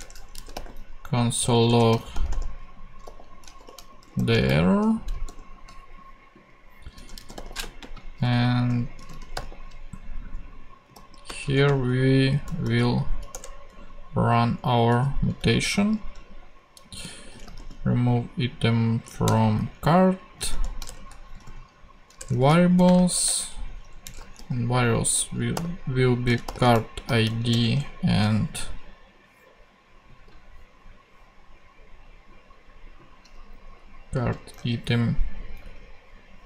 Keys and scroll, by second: 0.0-0.3 typing, 0.0 shift+Return, 1.7-4.9 typing, 5.2 super+;, 6.2-9.7 typing, 10.8-13.1 typing, 13.3 Return, 16.8-18.0 typing, 19.2 Return, 20.5 shift+[, 20.8 shift+Return, 21.3 v, 22.2 Return, 22.7-24.3 typing, 23.2 shift+Return, 25.5-27.7 typing, 34.2 super+c, 35.4 alt+Tab.